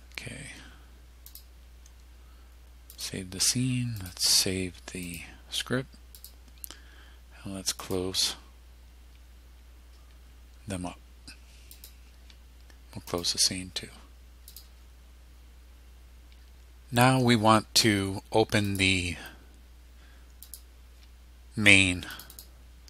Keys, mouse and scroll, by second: 1.3 click, 3.0 click, 4.0 click, 5.1 click, 6.2 click, 7.9 click, 11.8 click, 13.1 click, 14.5 click, 18.7 click, 20.5 click, 22.2 click.